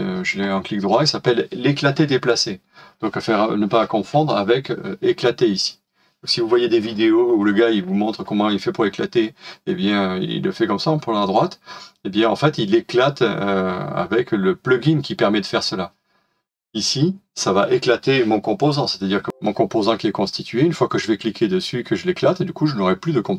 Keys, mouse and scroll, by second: 19.3 space.